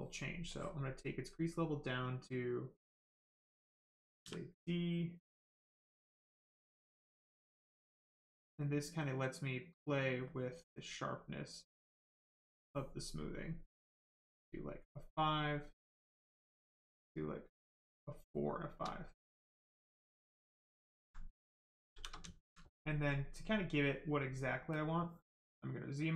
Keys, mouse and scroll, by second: 0.5 click, 4.8 right click, 7.2 click, 11.2 click, 15.4 click, 18.0 right click, 18.9 alt+right click, 19.2 right click, 21.0 alt+right click, 21.3 right click, 21.4 right click, 21.9 shift+f, 22.3 alt+right click, 22.6 right click.